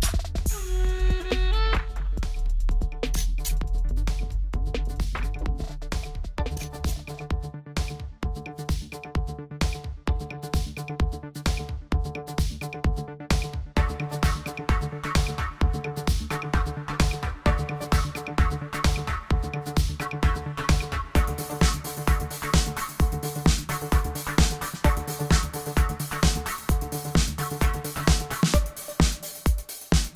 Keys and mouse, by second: 5.3-6.4 middle drag, 7.7 w, 9.2-10.3 middle drag, 10.7-14.4 middle drag, 15.6-16.7 middle drag, 20.6-22.7 drag, 23.4 click, 24.1 middle click, 25.5-27.0 drag, 26.5 w, 27.3 click, 27.9 middle click, 28.2-29.5 drag, 29.8 w.